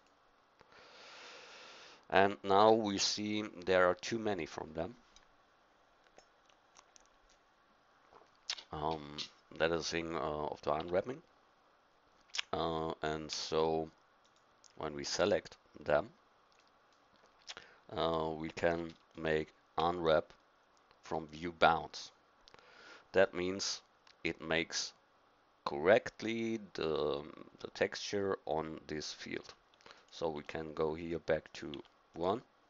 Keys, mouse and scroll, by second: 10.8 Tab, 13.3 a, 16.6-19.8 middle drag, 19.8 u, 30.0-31.1 drag.